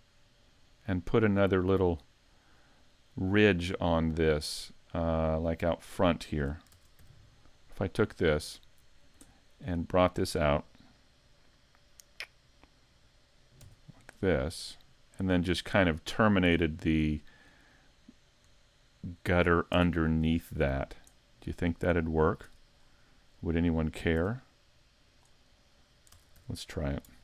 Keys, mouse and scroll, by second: 1.3 click, 2.2-3.5 scroll down 4, 3.5 middle click, 4.5 scroll up 3, 5.4 middle click, 6.2 shift+middle click, 6.7 ctrl+Tab, 7.8 right click, 8.2 scroll down 4, 8.6 middle click, 9.3 shift+middle click, 9.6 scroll up 4, 13.6 e, 16.4 click, 16.7 scroll up 2, 17.2 shift+middle click, 17.7 middle click, 18.8 shift+middle click, 19.7 Tab, 19.9 scroll up 3, 20.3 shift+middle click, 20.8 right click, 21.1 middle click, 22.5 Tab, 22.8 scroll up 1, 23.5 right click, 24.2 x, 26.3 ctrl+Tab.